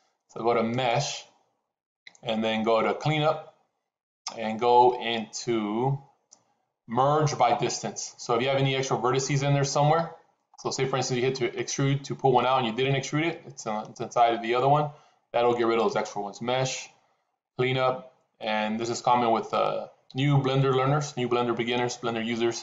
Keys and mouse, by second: 0.7-9.9 drag, 15.8-22.6 drag.